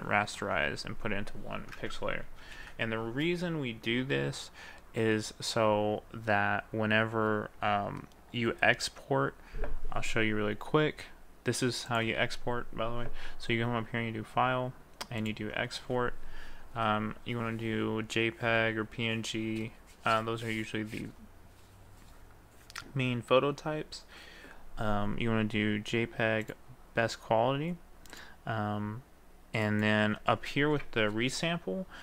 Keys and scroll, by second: 2.5 ctrl+d.